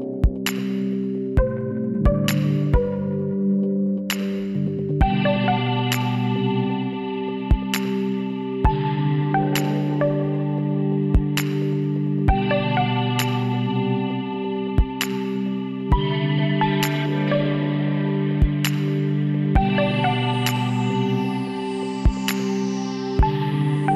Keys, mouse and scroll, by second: 2.4-7.1 middle drag, 7.1 KP_Divide, 8.5 Tab, 9.5 a, 10.1 Tab, 10.4 a, 19.1-21.7 middle drag, 22.1-23.9 middle drag.